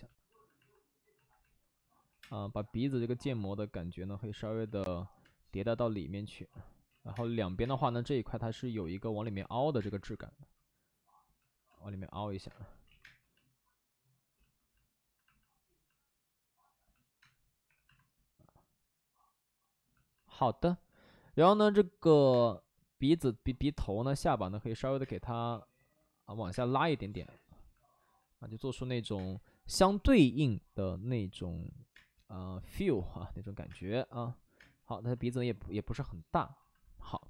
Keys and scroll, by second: 2.0 5, 2.1 space, 5.2 space, 6.8 ctrl+z, 7.1 space, 7.3 ctrl+z, 7.6 space, 9.3 space, 9.7 space, 9.9 1, 12.4 space, 12.8 ctrl+z, 12.9 space, 15.6 space, 17.1 space, 17.6 3, 18.3 3, 18.8 3, 22.2 1, 22.3 space, 25.0 space, 25.3 3, 26.4 space, 29.2 space, 29.8 3, 30.0 3, 31.9 space, 33.6 space, 35.7 space.